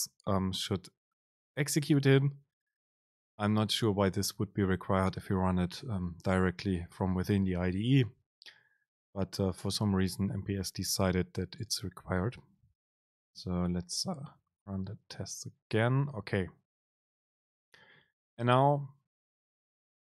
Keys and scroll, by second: 14.7 super+r.